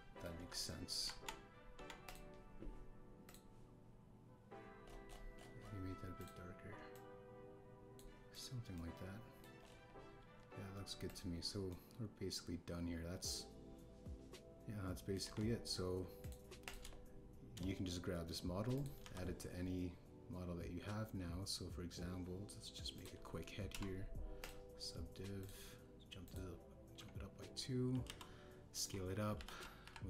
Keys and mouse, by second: 0.7 click, 1.3 KP_1, 2.0 Tab, 2.7 Tab, 3.0 click, 9.7-10.4 middle drag, 11.2 KP_1, 12.0 click, 12.6-16.1 middle drag, 16.2 KP_1, 19.7 click, 19.9 shift+a, 24.7 q, 26.3 click, 27.2 click, 29.0 s.